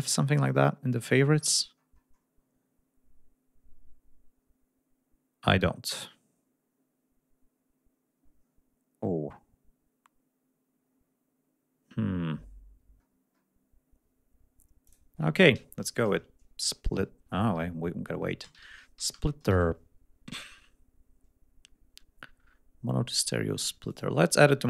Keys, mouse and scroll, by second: 0.8-1.4 scroll up 3, 1.4-2.0 scroll down 2, 13.0-13.6 scroll up 2, 14.9 click, 18.2-20.0 typing, 23.9 click.